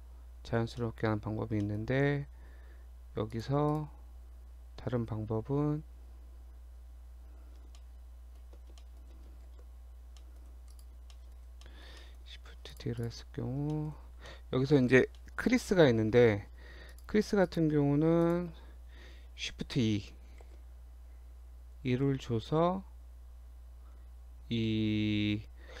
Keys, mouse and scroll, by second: 0.8 shift+middle click, 1.1 scroll down 1, 1.7 middle click, 1.8 scroll up 1, 3.3 click, 3.7 click, 7.8 shift+middle click, 8.4-8.8 shift+scroll down 2, 8.8 shift+middle click, 9.5 shift+d, 11.2 shift+middle click, 11.4 scroll up 2, 11.7 middle click, 12.0 shift+middle click, 12.8 click, 13.0 click, 13.3 Tab, 13.5 scroll down 1, 13.8 shift+middle click, 14.1 scroll up 1, 14.3 middle click, 15.1 scroll up 1, 15.2 middle click, 16.9 click, 17.5 click, 18.3 shift+click, 18.4 shift+click, 20.5 shift+e.